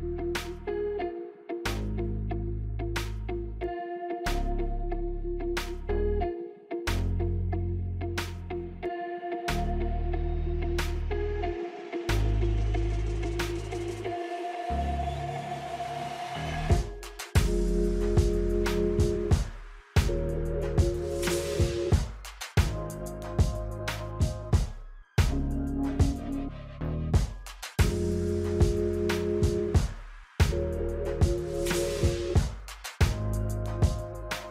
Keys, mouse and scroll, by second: 1.3 click, 2.3 click, 3.5 alt+scroll up 1, 4.4 space, 4.5 click, 4.7 space, 5.2 click, 9.7 click, 11.1 right click, 11.9 click, 12.2 right click, 14.7 click, 22.4 F9, 23.7 click, 25.9 click, 28.5 click, 28.8 F9, 29.9 click.